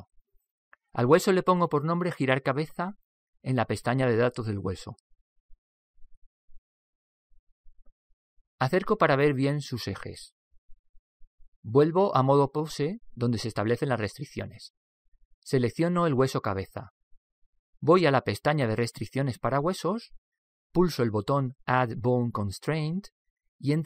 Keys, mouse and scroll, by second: 2.6-5.3 drag, 10.1-14.3 middle drag, 14.3 Tab, 14.8 Tab, 17.2-18.8 right drag, 19.6 click, 21.6 click.